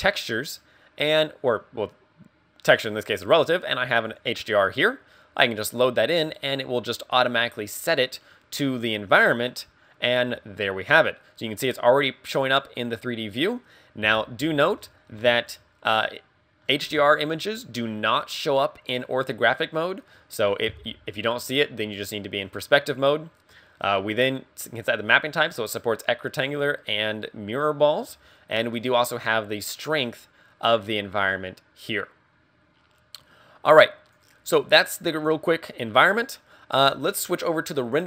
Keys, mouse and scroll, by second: 8.0 click, 10.2 scroll down 5, 14.1 KP_5, 14.8-15.4 scroll down 8, 15.6 middle click, 17.0 scroll down 2, 17.4 middle click, 20.8 KP_5, 21.4-22.1 scroll up 11, 22.6 scroll up 3, 23.2 middle click, 24.8 click, 28.9 click, 36.2 scroll up 2.